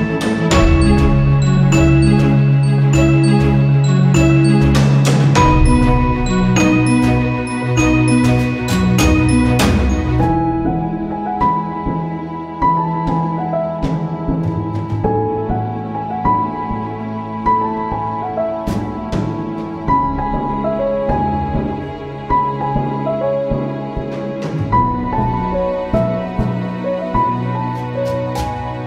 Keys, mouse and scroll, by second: 3.5 click, 4.0 right click, 5.2-7.3 drag, 8.3 right click, 9.0-14.5 drag, 15.3 ctrl+c, 16.2 ctrl+f, 17.1 right click, 17.9 click, 20.0 typing, 20.1 click, 21.7-25.0 drag, 25.5 click, 25.7 right click, 26.7-28.8 drag.